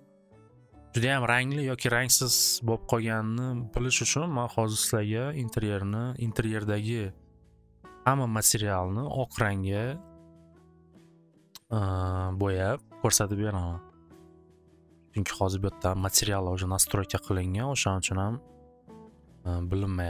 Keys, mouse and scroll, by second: 0.4-1.4 drag, 2.3 click, 3.8 click, 5.2 click, 5.9 click, 9.3 right click, 10.1 click, 12.2 click, 16.0 click, 17.7 click, 19.3 click.